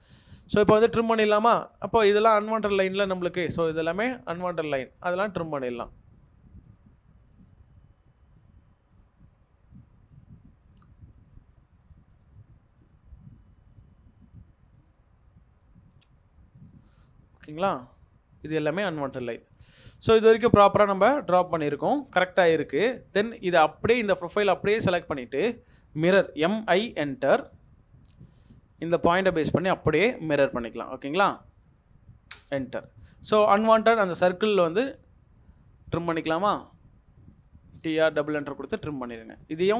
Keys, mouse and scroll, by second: 3.7 double click, 7.7 middle click, 12.1 double click, 19.0 middle click, 19.2-19.5 scroll down 1, 19.5 Escape, 19.5-19.8 scroll, 19.8 scroll down 1, 19.9 middle click, 20.4 scroll down 1, 20.6 double click, 20.8 Delete, 21.5 double click, 21.6 Delete, 22.1 middle click, 22.7-23.8 scroll up 1, 25.5-26.3 scroll up 1, 26.3 typing, 32.3 space, 33.6-34.4 typing, 34.5 middle click, 37.7 scroll down 1, 38.0 middle click, 38.6 Escape.